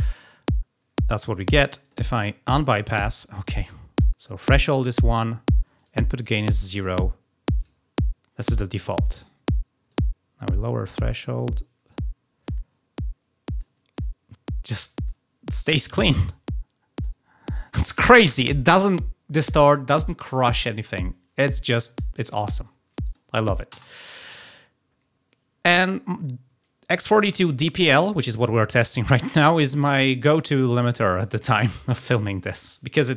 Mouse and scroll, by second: 1.7 click, 3.3-4.1 drag, 5.7 click, 7.5 click, 9.8-11.8 drag, 13.5 click, 15.0 click, 16.1 click, 22.9 click.